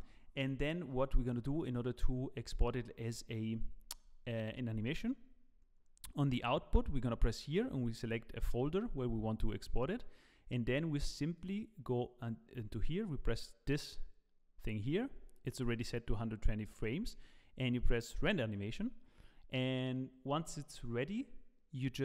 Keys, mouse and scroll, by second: 1.6 click, 11.3 click, 13.7 click.